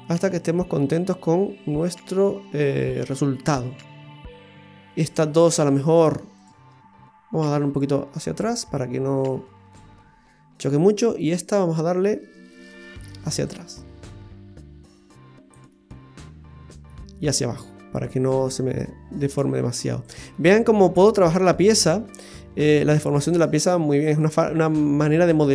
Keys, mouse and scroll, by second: 3.1-4.3 scroll up 1, 5.0 right click, 6.3 shift+right click, 7.7 click, 10.9 right click, 12.0 middle click, 13.4 click, 15.7 middle click, 16.9 scroll down 1, 18.0 click, 20.3 middle click.